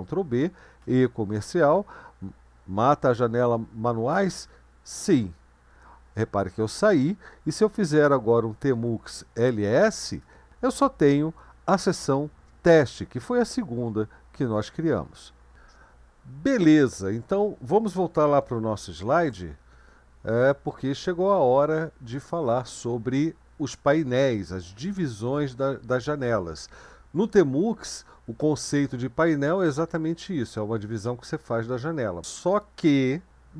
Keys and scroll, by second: 0.8 &, 5.0-5.7 typing, 7.8 Up, 8.7 Up, 10.2 Return, 19.0 super+1, 22.2 Right.